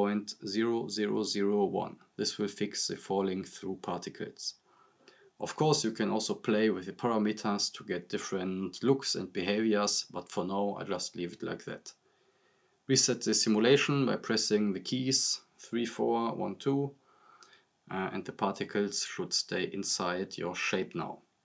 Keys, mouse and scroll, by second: 5.1-5.6 drag, 9.2 scroll up 1, 13.4 scroll up 1, 14.3 scroll down 1, 15.3-15.9 drag.